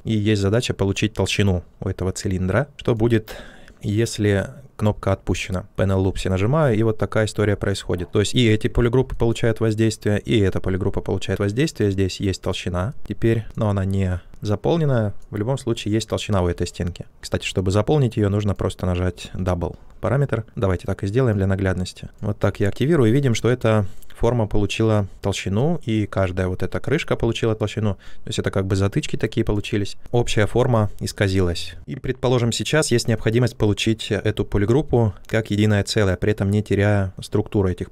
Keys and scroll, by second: 17.0 ctrl+z, 19.2 ctrl+z, 30.0 ctrl+z.